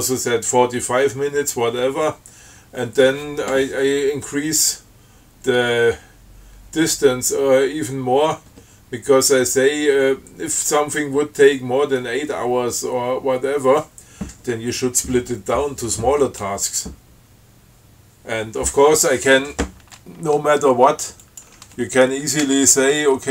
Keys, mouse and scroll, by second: 21.5 click, 22.7 BackSpace.